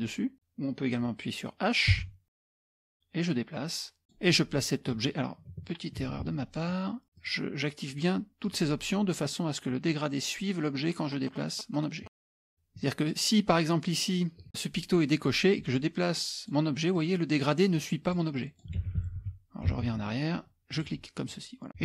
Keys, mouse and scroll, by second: 2.0 h, 2.4-4.5 drag, 6.1 ctrl+z, 7.2 click, 7.9 click, 8.5 click, 9.9-12.1 drag, 15.7-16.8 drag, 17.0 click, 17.8-18.8 drag, 18.8 ctrl+z, 19.0 ctrl+z, 19.2 ctrl+z, 19.8 ctrl+z, 20.7-21.7 drag.